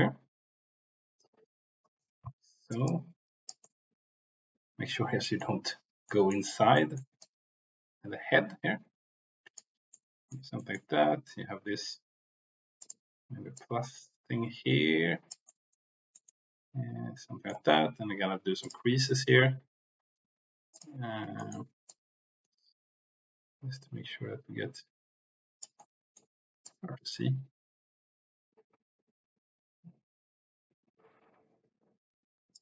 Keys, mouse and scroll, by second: 2.8 click, 3.6-5.4 middle drag, 6.0 middle click, 6.7 middle click, 7.2 middle click, 7.3-9.6 drag, 9.9 middle click, 10.5 middle click, 12.8 click, 13.5-15.3 drag, 15.4 middle click, 15.8 click, 16.2-17.4 middle drag, 18.5 click, 21.4 shift+middle click, 21.8-25.6 drag, 25.8 middle click, 26.6-32.5 drag.